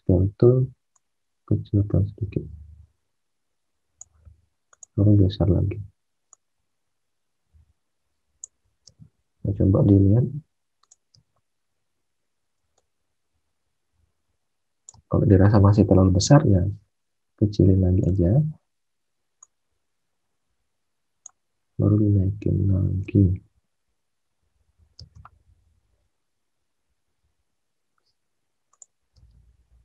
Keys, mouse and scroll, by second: 8.8 space, 11.1 space, 23.0 space, 24.9 space.